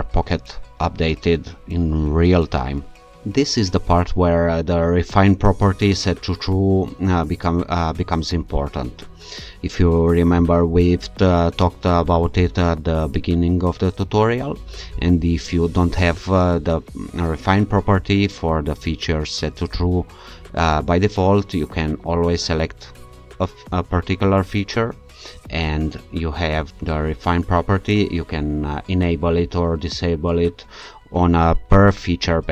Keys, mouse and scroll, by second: 19.7 click, 24.8-25.4 scroll down 2, 25.4-25.8 scroll down 1.